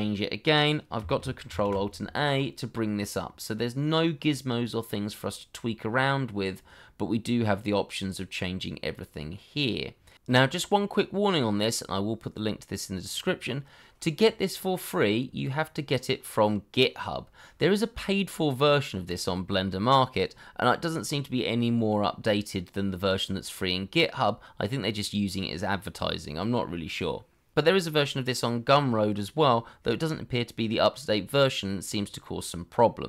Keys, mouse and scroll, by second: 1.4 ctrl+alt+a.